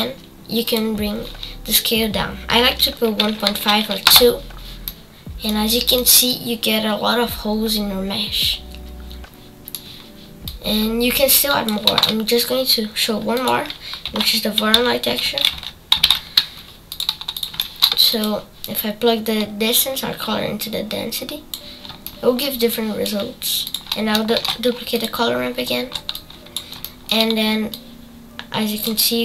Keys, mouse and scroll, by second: 4.8 middle click, 5.7 scroll up 3, 6.0-9.0 middle drag, 10.4-16.9 drag, 21.7 click, 23.6 click, 24.3 shift+d, 27.9-29.2 drag.